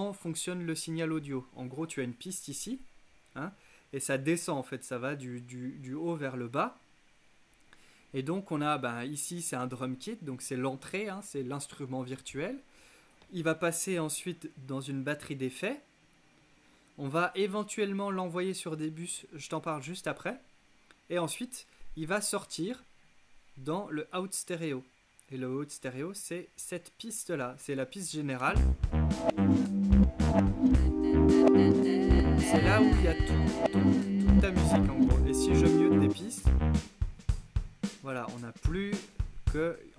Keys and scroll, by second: 28.5 space.